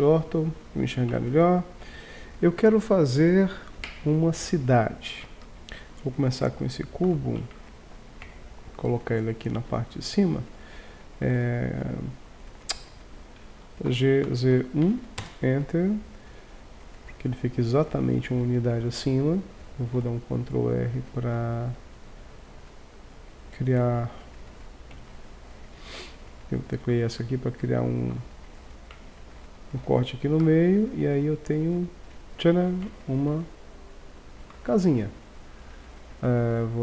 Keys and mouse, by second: 1.1 Tab, 6.3 g, 13.9 g, 20.0 ctrl+r, 28.2 z, 29.0 a, 29.8 b, 32.9 Tab, 34.5 z.